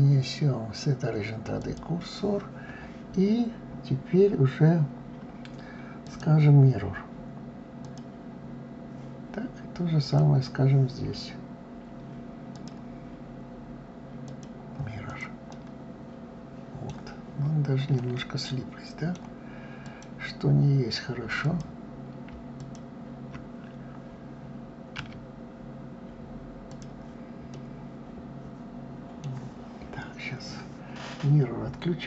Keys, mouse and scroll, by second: 5.7-8.7 drag, 9.6 click, 12.2-14.8 drag, 15.0-16.8 middle drag, 16.8-17.6 scroll up 2, 17.6-19.4 middle drag, 19.4 click, 21.0 click, 22.2 shift+click, 24.6 s, 27.1-30.1 middle drag.